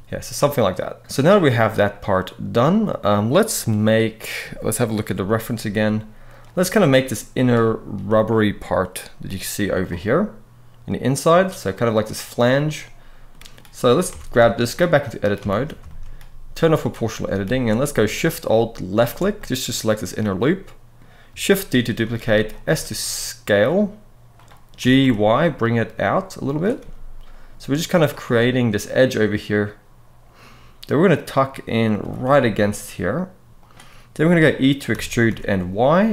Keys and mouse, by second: 0.3-2.8 middle drag, 12.5 middle click, 13.8 Tab, 14.1 shift+middle click, 14.7 middle click, 15.2 alt+a, 15.6 shift+middle click, 16.4 click, 16.8 middle click, 17.3 alt+a, 18.6 alt+shift+click, 19.1-20.7 middle drag, 21.7 shift+d, 22.0 right click, 22.4 s, 24.1 click, 24.5 g, 24.7 y, 26.2 click, 26.5 s, 28.1-31.4 middle drag, 31.7 g, 32.0 y, 33.3 click, 34.7 e, 35.0 y.